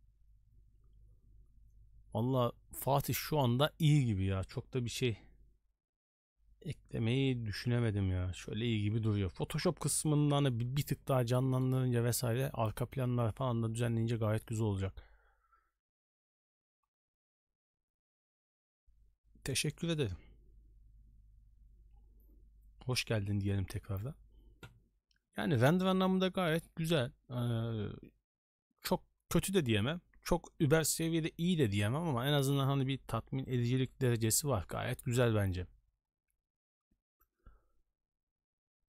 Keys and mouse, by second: 11.3 middle click.